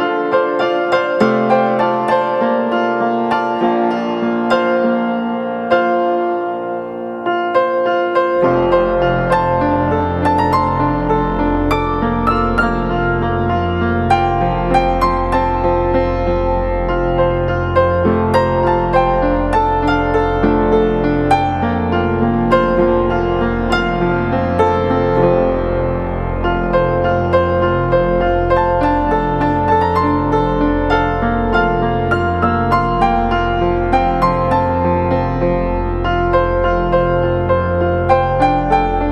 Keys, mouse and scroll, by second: 1.4 ctrl+t, 6.1 double click, 14.0-14.7 [, 20.1-21.2 typing, 23.0 double click, 24.3 ctrl+z, 27.0-27.8 typing, 32.1 ctrl+-, 32.1 ctrl+-, 32.6 ctrl+=, 32.7 ctrl+=, 33.0-35.1 typing, 34.5 double click, 36.1 double click.